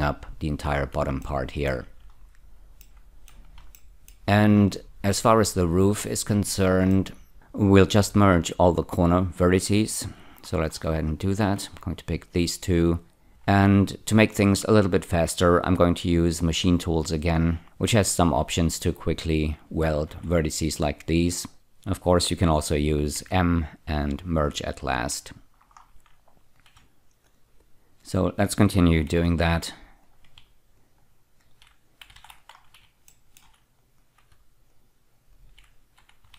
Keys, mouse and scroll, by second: 1.2 shift+middle click, 2.2-2.8 scroll up 3, 2.8 middle click, 3.8 shift+middle click, 4.6-5.9 scroll up 2, 6.9 middle click, 10.1 1, 10.5 scroll up 3, 11.4 click, 12.3 shift+click, 20.1 y, 23.2 m, 25.0 click, 25.8 scroll up 2, 27.3 shift+click, 28.0 shift+click, 29.1 alt+y, 30.0 click, 30.8 shift+click, 32.2 alt+y, 32.6 scroll down 2, 33.1 shift+middle click, 34.0 click, 34.7 shift+click, 35.3 shift+click.